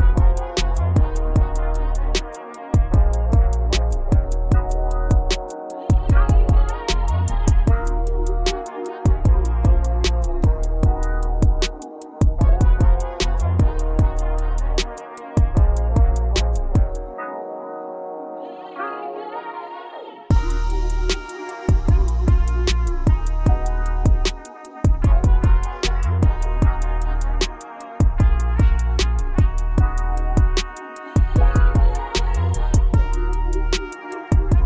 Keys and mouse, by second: 0.0 KP_2, 0.8 Return, 3.3-5.3 typing, 7.2 KP_4, 9.0 right click, 10.4 e, 11.1 KP_Subtract, 12.4 z, 14.0 KP_4, 14.4 KP_2, 15.0 Return, 16.8 right click, 18.7 e, 20.0 KP_Subtract, 21.7 z, 23.0 KP_4, 23.3 KP_2, 23.8 Return, 29.6 KP_6, 30.3 KP_6, 31.4 KP_6, 31.4 KP_4, 31.7 KP_4, 32.9 KP_Add, 33.2 KP_Add, 33.8 KP_Add.